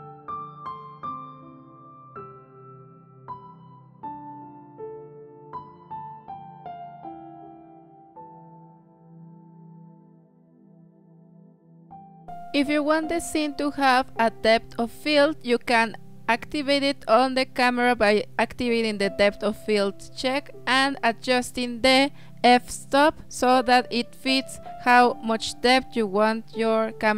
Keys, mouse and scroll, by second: 1.1-3.4 drag, 4.0 z, 5.1-6.7 drag, 6.8-7.9 drag, 8.8 click, 9.2 Left, 9.7 Left, 11.6 Left, 12.3 Left, 12.3 click, 13.3 click, 22.6-25.4 drag.